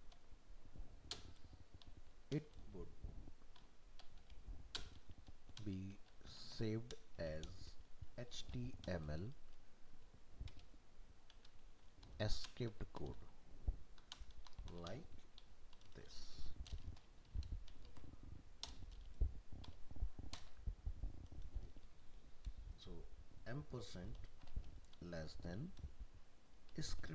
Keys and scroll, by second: 17.9 ctrl+s.